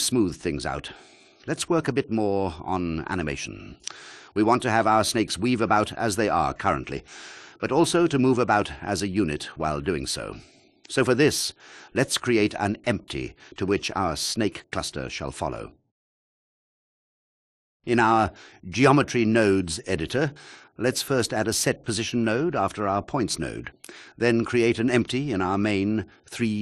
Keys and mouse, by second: 1.1 click, 2.5 ctrl+click, 17.2 shift+a, 23.1 shift+a, 26.4 click.